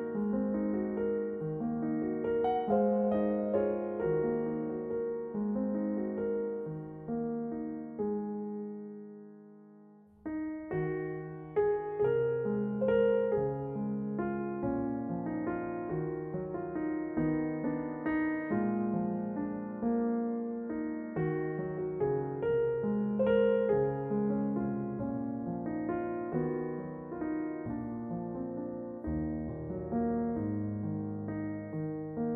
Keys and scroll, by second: 3.6 a, 6.8 s, 9.0 s, 10.4 ctrl+r, 15.6 r, 22.0 r, 23.8 r.